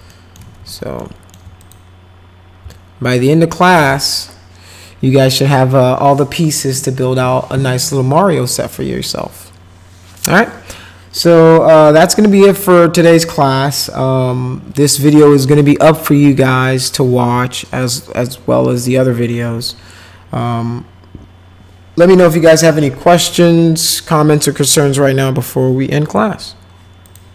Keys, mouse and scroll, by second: 0.1 alt+right click, 0.6 alt+q, 1.0 alt+right click, 1.6 click, 2.7 alt+middle click, 27.0 click.